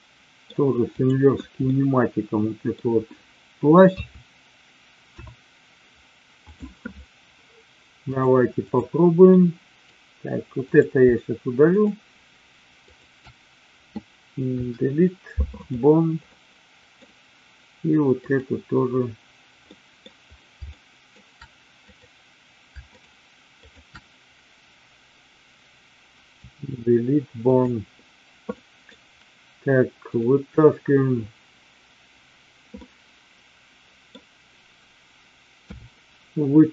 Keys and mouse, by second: 0.9 click, 1.7-2.8 middle drag, 3.9 KP_3, 5.1 KP_1, 8.1-8.8 drag, 9.2 middle click, 11.6 shift+click, 14.6 Delete, 16.2 middle click, 18.1 click, 19.6 middle click, 20.7 shift+middle click, 21.8 click, 22.8 shift+click, 23.6 shift+click, 26.1 Delete, 28.6 middle click, 30.1 click, 32.8-34.1 middle drag, 35.7 KP_3.